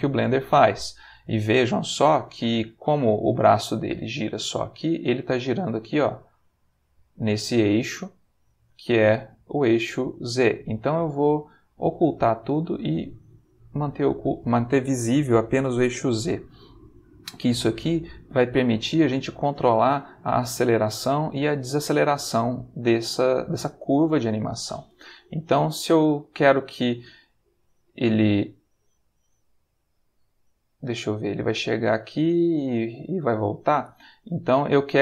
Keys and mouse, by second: 1.6-2.7 middle drag, 5.3 g, 8.5 Escape, 11.7 click, 13.1 click, 16.9-20.0 drag, 21.6 click, 23.8-25.1 drag, 25.6-35.0 drag.